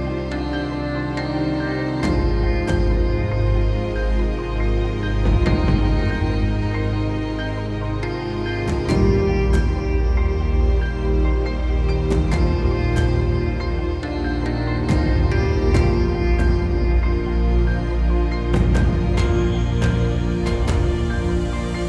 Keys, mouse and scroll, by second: 12.0 KP_1, 12.2 KP_0, 12.4 Return, 17.3 KP_5, 17.4 Return, 18.7 KP_2, 18.8 Return, 19.8 KP_0, 19.9 Return, 20.2 KP_3, 20.4 Return, 21.6 middle click.